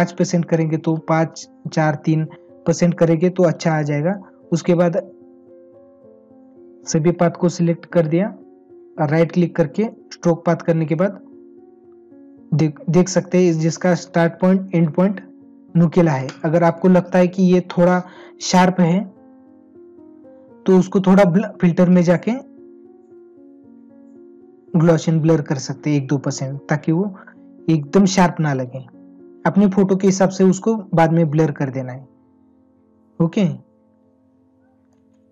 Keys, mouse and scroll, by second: 9.1 right click.